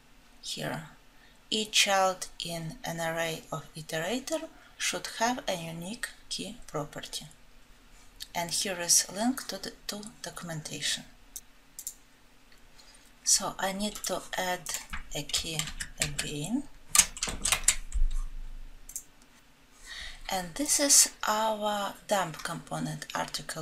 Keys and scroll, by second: 15.7 ctrl+z.